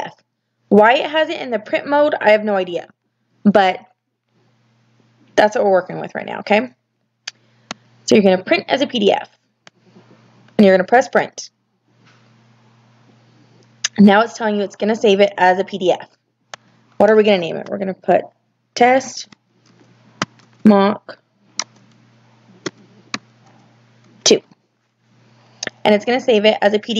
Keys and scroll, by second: 18.4-23.9 typing.